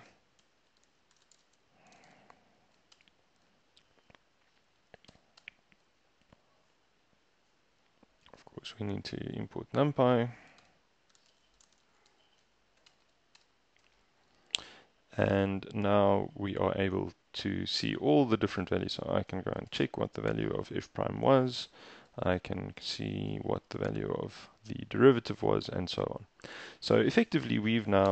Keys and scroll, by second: 0.0-3.0 typing, 3.0 shift+Return, 5.2 shift+Return, 5.5 shift+Return, 10.2 Escape, 10.6-13.5 typing, 10.7 Return, 13.1 shift+Return, 19.4 f, 19.8 shift+Return, 22.2-23.9 typing.